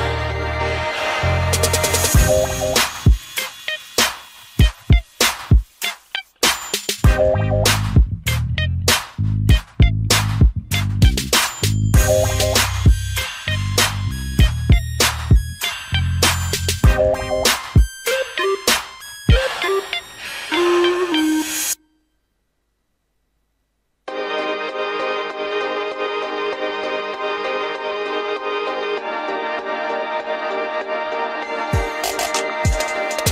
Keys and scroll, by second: 0.5 ctrl+alt+shift+space, 1.0 ctrl+alt+shift+e, 17.6 ctrl+g, 18.6 ctrl+alt+shift+e.